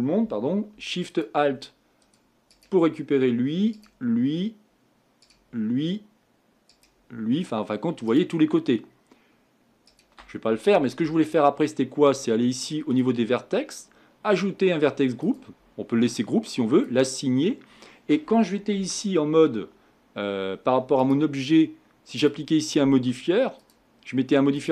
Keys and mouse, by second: 18.8 Tab, 22.3-23.7 drag.